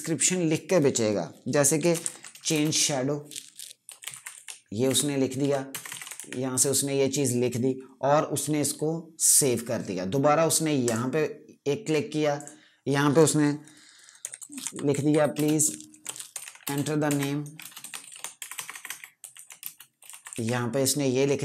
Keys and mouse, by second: 1.5-6.6 typing, 10.7 click, 13.9-20.7 typing.